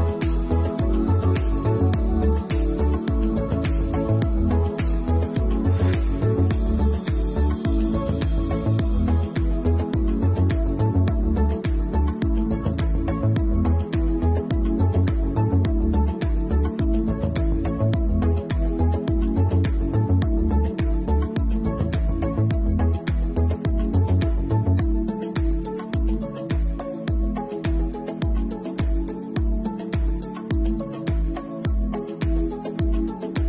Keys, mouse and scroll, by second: 6.6 middle click, 7.1 shift+middle click, 9.1 middle click, 10.0 Tab, 11.0 click, 11.6 shift+click, 12.0 middle click, 12.8 shift+click, 13.9 ctrl+x, 15.8 ctrl+`, 16.3-16.8 scroll down 4, 16.7 middle click, 17.5 scroll down 2, 17.8 shift+middle click, 18.3 middle click, 18.8 scroll down 1, 19.4 shift+middle click, 20.0 a, 20.4 middle click, 20.9 a, 22.0 middle click, 23.6 click, 23.9 middle click, 25.0-25.5 scroll down 2, 25.4 middle click, 26.0 ctrl+4, 26.4 ctrl+4, 26.8 middle click, 27.4-27.8 scroll down 2, 27.8 shift+middle click, 28.5 middle click, 29.5 shift+middle click, 29.9 middle click, 30.4-31.4 scroll up 4, 31.3 Tab, 32.9 click, 33.3 middle click.